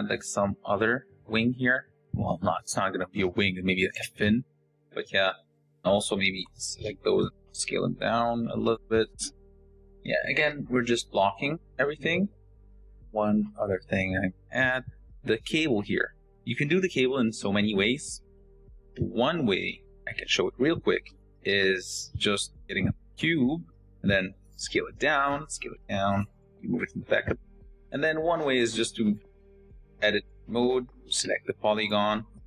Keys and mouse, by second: 4.5 Tab, 5.5 l, 6.0 s, 7.3 g, 9.4 Tab, 10.1 g, 11.9 shift+click, 12.3 shift+click, 22.3 r, 22.3 x, 22.3 shift+a, 23.5 s, 24.5 s, 25.4 s, 25.9 g, 27.5 g, 28.3 s, 28.8 g, 29.7 Tab, 30.5-32.4 typing.